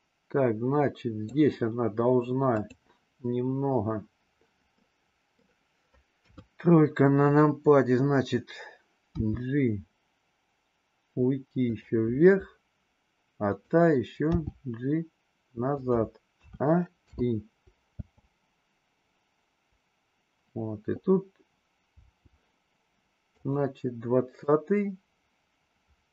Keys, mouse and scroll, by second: 2.4 click, 4.7 middle click, 6.2 KP_3, 9.2 g, 13.4-14.7 drag, 14.7 g, 16.4 a, 17.1 i, 17.9 space, 22.0 space, 23.4 click, 24.4-26.1 drag.